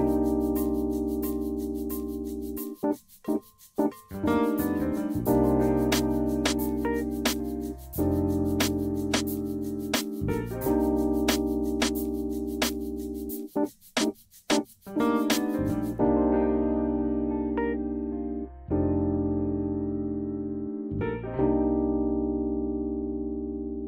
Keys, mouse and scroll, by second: 0.1 click, 7.9 click, 13.6 click, 17.8 click, 20.0 click, 20.7 KP_1, 20.9 KP_0, 21.2 Return, 23.0 middle click.